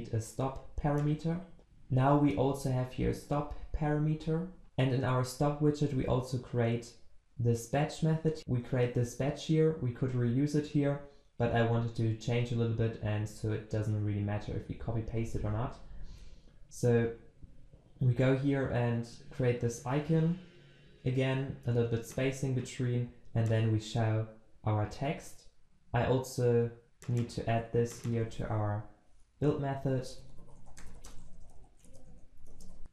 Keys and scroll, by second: 1.1 ctrl+b, 27.5 ctrl+c, 28.3 ctrl+v.